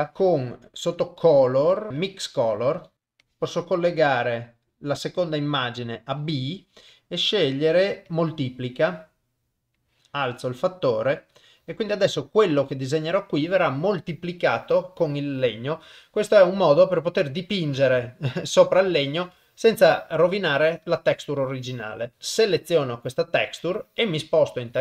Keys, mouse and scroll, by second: 0.1 Delete, 0.1 shift+a, 3.4-4.7 drag, 7.0-8.4 drag, 9.8-11.3 drag, 12.7 click, 16.2 ctrl+middle click, 17.2 middle click, 18.1 ctrl+middle click, 18.9 shift+middle click.